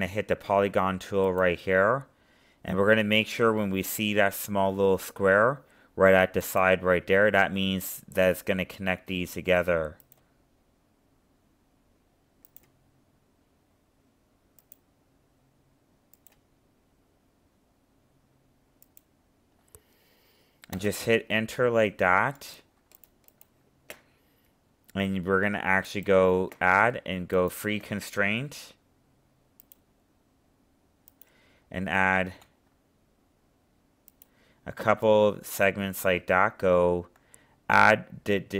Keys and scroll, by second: 32.2 ctrl+z.